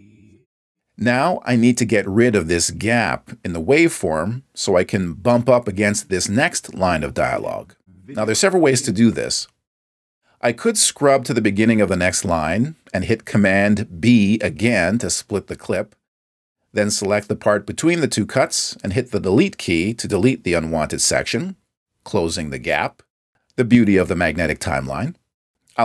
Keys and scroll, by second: 15.7 super+b, 22.3 BackSpace.